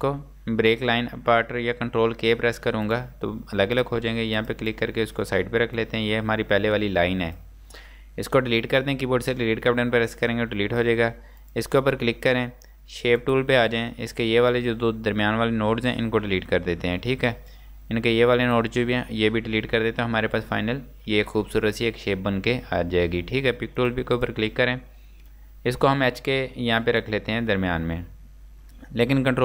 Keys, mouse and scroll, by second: 2.8 right click, 2.9 click, 10.9 Delete, 11.4 click, 13.7 scroll up 1, 14.5 click, 16.3 Delete, 17.5 click, 19.0 Delete, 19.8 scroll down 1, 21.3 space, 23.8 click, 24.5 scroll down 1, 25.4 click.